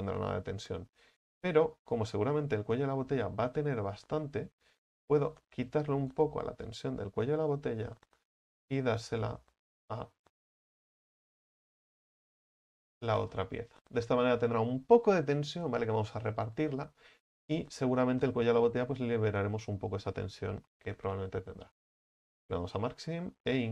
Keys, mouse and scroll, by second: 0.2-2.2 scroll up 7, 4.8 right click, 5.3 alt+shift+right click, 6.2 alt+shift+right click, 7.2-8.2 scroll down 7, 8.2-9.2 scroll up 8, 9.2 alt+shift+right click, 9.6 scroll down 1, 9.7 scroll up 1, 9.9-10.2 middle drag, 10.2-10.7 scroll down 1, 10.7-11.7 scroll up 5, 11.7 alt+shift+right click, 12.4 alt+shift+right click, 12.7 scroll down 9, 13.4-21.8 middle drag, 21.8 u, 22.7-23.7 middle drag.